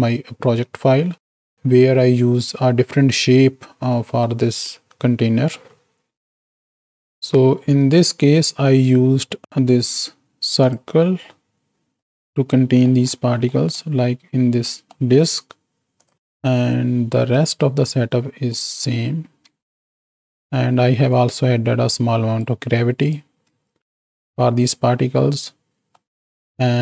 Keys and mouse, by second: 2.0-2.7 drag, 4.2 click, 5.1 click, 7.2 z, 10.6 click, 12.6 click, 12.6 right click, 13.5 click, 13.5 right click, 14.7 click, 14.7 right click, 16.0 click, 17.3 right click, 17.3 z, 18.6 click, 19.6 ctrl+space, 21.1-22.7 drag, 23.0 click, 23.6 ctrl+space, 25.3 middle click, 26.6 middle click.